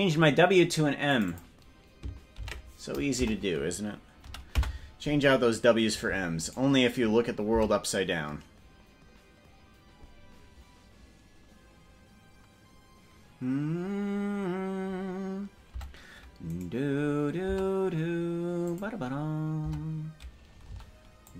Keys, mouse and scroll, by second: 1.2 click, 1.3-5.5 drag, 6.6 right click, 7.8 Tab, 16.0 Tab, 16.6 right click, 17.6 Tab, 18.7 click, 19.8 Tab, 20.8 c.